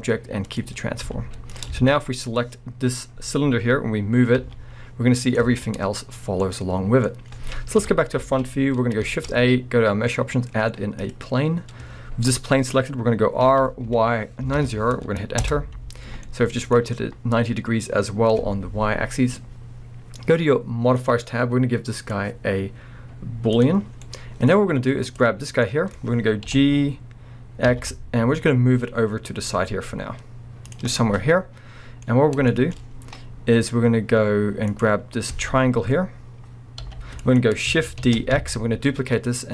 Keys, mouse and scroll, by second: 0.8-1.1 scroll up 2, 1.1 z, 1.7 alt+a, 1.8-2.6 scroll up 4, 2.3 click, 4.4 g, 5.4 right click, 5.5 scroll down 1, 6.4-21.0 middle drag, 7.8 KP_1, 8.2 alt+a, 8.5 scroll up 1, 9.0 shift+a, 13.4 r, 15.5 Return, 17.5 scroll, 21.0-24.0 drag, 23.9 scroll down 1, 24.0-25.1 middle drag, 24.5-25.1 scroll up 2, 25.1 click, 25.3 scroll down 2, 25.6-30.7 middle drag, 26.4 g, 30.7 click, 30.9 scroll, 30.9-34.7 middle drag, 32.1 scroll, 32.8-34.7 scroll, 34.7 click, 36.8 g, 37.4 right click, 38.0 shift+d.